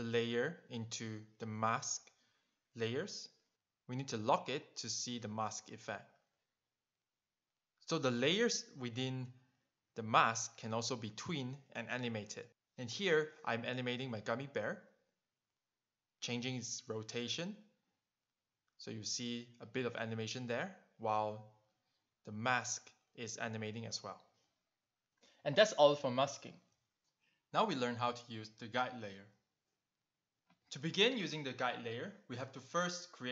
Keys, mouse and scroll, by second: 4.1 click, 4.8 click, 9.2 click, 9.8 click, 10.4 click, 10.8 click, 10.8 double click, 11.4 click, 12.6 click, 13.2 q, 13.5 click, 13.9 shift+click, 14.7 click, 15.0 click, 15.3 shift+click, 15.7 click, 16.2 alt+click, 16.8 click, 17.0 alt+click, 17.8 click, 18.0 right click, 18.5 click, 18.9 click, 20.1 click, 20.6 click, 22.8 Return, 27.7 click, 32.2 click.